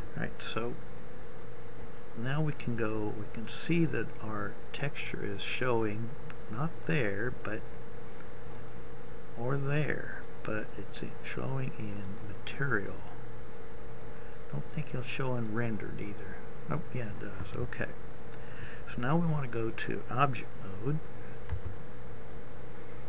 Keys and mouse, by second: 9.2 click, 22.6 Tab.